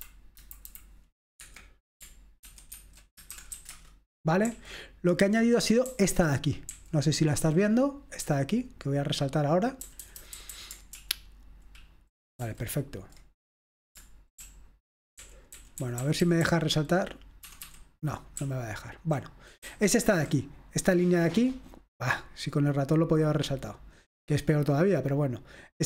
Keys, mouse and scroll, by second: 0.1 Delete, 1.5 Escape, 2.5 ctrl+w, 2.8 ctrl+w, 3.2-4.5 typing, 6.1-6.8 typing, 8.2-9.3 typing, 11.0 super+l, 11.0 typing, 11.7 super+l, 12.5 super+l, 12.5 super+h, 15.3-19.7 typing, 22.1-25.0 drag.